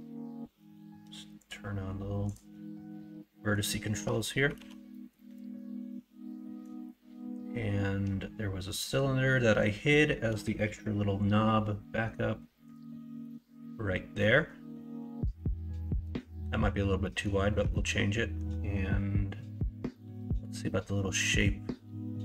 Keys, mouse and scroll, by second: 3.3 middle click, 3.9 middle click, 4.5 alt+z, 4.9 middle click, 5.5-6.6 middle drag, 9.6 middle click, 13.2 middle click, 16.0 middle click, 17.0 middle click, 17.6 middle click, 20.2 middle click, 21.1 middle click.